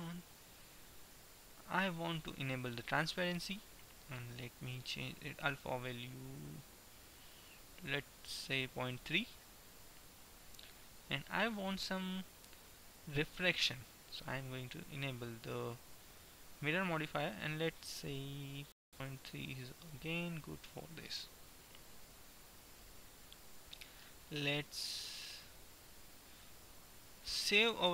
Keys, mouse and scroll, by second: 3.2-4.8 drag, 4.8 middle click, 5.2-7.0 drag, 11.2-13.7 middle drag, 13.7-17.2 drag.